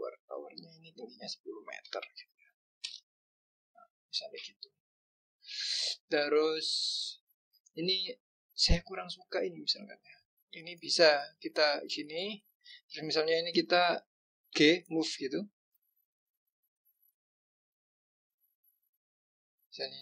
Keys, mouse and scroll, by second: 4.5-5.5 scroll up 4, 5.9 scroll down 1, 8.9 click, 12.1 shift+click, 14.5 g, 16.8 click.